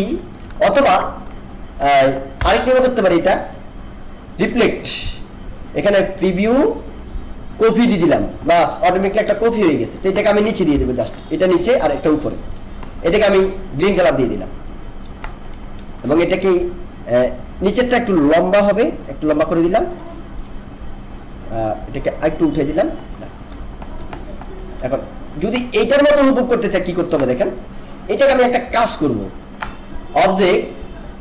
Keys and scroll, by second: 2.4 Delete, 10.7 ctrl+shift+[.